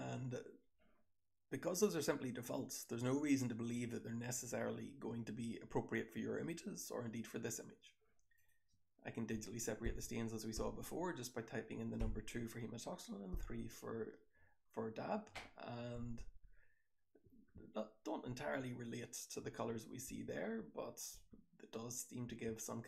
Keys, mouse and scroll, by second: 1.0-2.4 scroll up 1, 2.4-3.7 scroll up 1, 3.7-5.0 scroll up 1, 5.0-7.7 scroll up 1, 7.7-8.3 scroll up 1, 8.3 click, 8.3-9.9 scroll up 1, 9.9 2, 10.5 3, 12.0 2, 13.3 3, 16.1 2, 17.2 1, 18.2 2, 19.4 1, 20.0 2, 20.5 3, 21.1-22.2 scroll up 1, 21.1 2, 22.2-22.8 scroll up 1, 22.2 1.